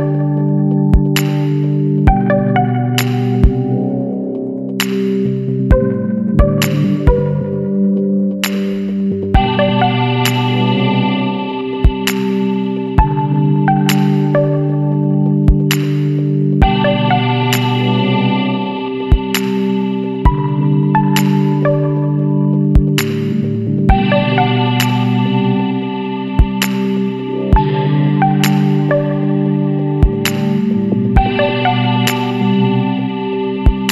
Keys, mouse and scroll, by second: 0.7 scroll down 2, 1.5 ctrl+v, 2.0 ctrl+scroll down 2, 2.9 click, 3.6 click, 4.0 scroll down 2, 4.4 click, 5.5 click, 6.9 click, 8.5 KP_5, 8.7 KP_4, 10.7 click, 11.6 KP_1, 11.8 KP_2, 13.6 click, 15.7 click, 16.3 click, 16.6 scroll down 2, 17.6 ctrl+v, 18.0 scroll down 2, 19.5 click, 19.8 scroll down 2, 20.3 click, 21.6 click, 23.9 click, 24.6 KP_6, 24.8 KP_0, 26.4 click, 27.4 KP_1, 27.6 KP_0, 27.8 KP_Decimal, 28.0 KP_5, 29.8 click, 30.7-31.0 scroll down 1, 31.5-31.8 scroll down 1, 33.6 BackSpace.